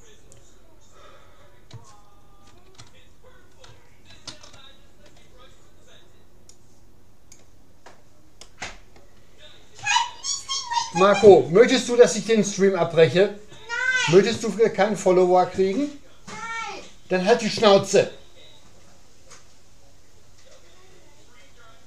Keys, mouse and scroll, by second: 2.5 ctrl+z, 4.1 ctrl+z, 6.5-8.3 drag, 8.5-12.5 middle drag.